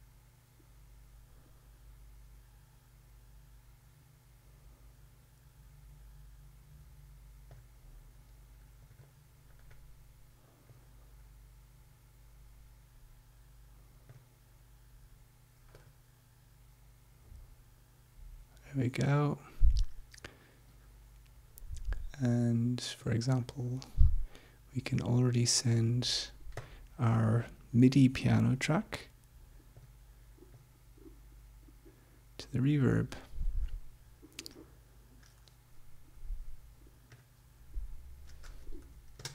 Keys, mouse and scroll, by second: 7.5 click, 9.0 middle click, 10.6 click, 14.0 click, 15.9 right click, 19.0 click, 23.0 right click, 26.5 click, 29.7 click, 30.6-33.3 drag, 37.3 click, 38.8 Home.